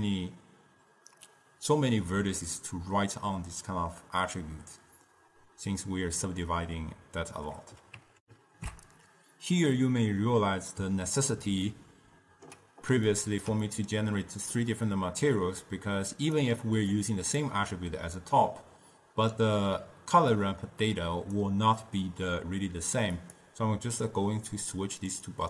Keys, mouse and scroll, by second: 8.3 ctrl+alt+shift+q, 11.7-15.7 ctrl+middle drag, 15.7-17.1 drag, 20.4 click, 23.3-25.3 drag.